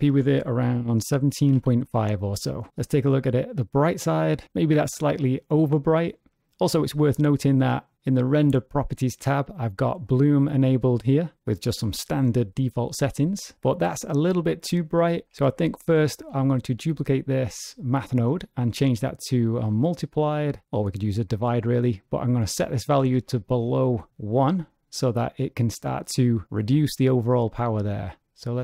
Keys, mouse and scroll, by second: 2.8 click, 6.3 click, 10.0 click, 10.6 click, 11.3-11.7 scroll down 2, 15.7 click, 16.4 shift+d, 18.4 click, 21.6 middle click, 22.6 click, 25.1 middle click, 27.8 shift+click.